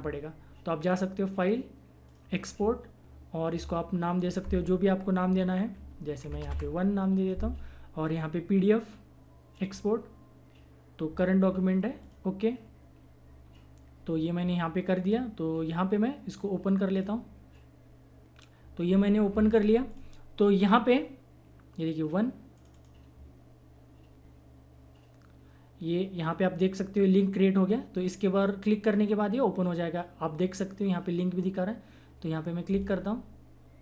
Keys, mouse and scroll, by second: 0.9 click, 6.0-7.0 typing, 9.5 click, 12.0 click, 12.3 click, 16.9 click, 22.5 click, 32.7 click.